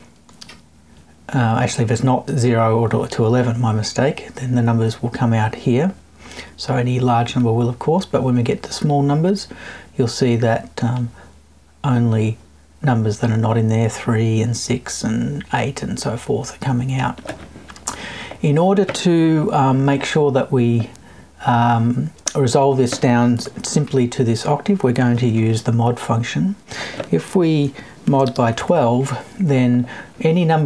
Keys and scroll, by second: 23.3 BackSpace.